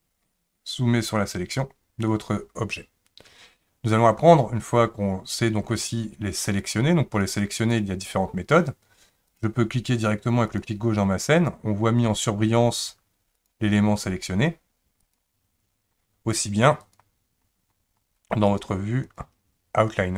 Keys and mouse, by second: 13.4 click, 14.1 click, 15.0 click, 16.8 click, 18.5 click.